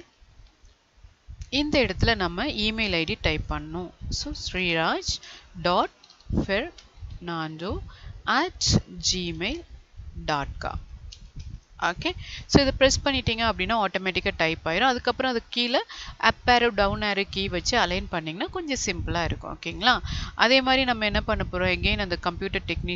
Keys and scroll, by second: 3.2 ctrl+a, 12.5 space, 16.0 Down.